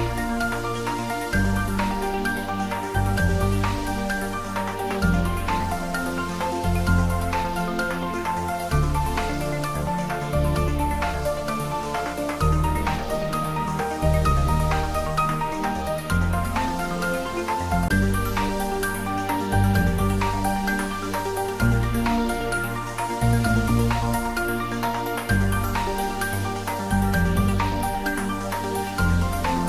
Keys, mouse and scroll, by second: 2.7 s, 2.9 x, 13.2 click, 15.3 click, 17.4 scroll down 1, 17.8 middle click, 18.5 scroll up 1, 20.0-21.8 drag, 21.8 right click, 23.8 click, 26.2 right click, 26.7 right click, 27.7 click.